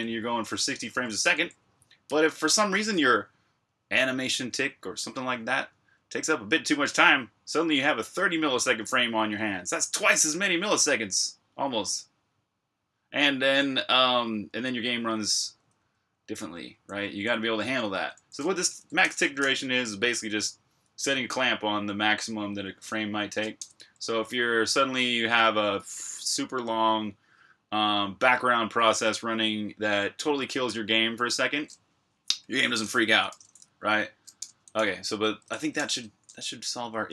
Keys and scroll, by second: 0.0-2.2 typing, 13.3 j, 15.5-19.1 typing, 23.4 Escape, 32.6-33.2 typing, 34.2 Escape, 35.4-36.3 typing.